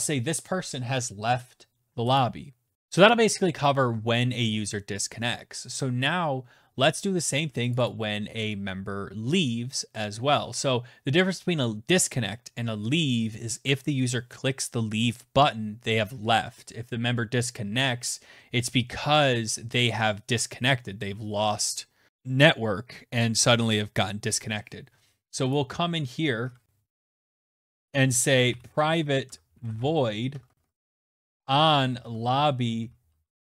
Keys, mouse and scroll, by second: 1.0 click, 1.6 click, 2.7 Return, 6.5 click, 6.6 click, 24.3 click, 26.1 Tab, 26.3 Return, 26.8-33.4 typing, 27.9-29.0 drag, 32.9 Return.